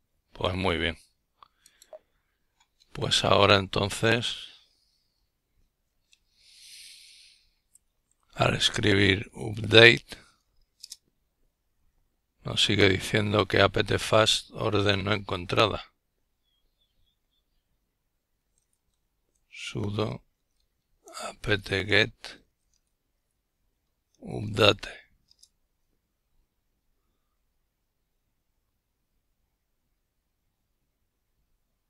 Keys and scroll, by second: 2.1-8.8 typing, 9.1 Return.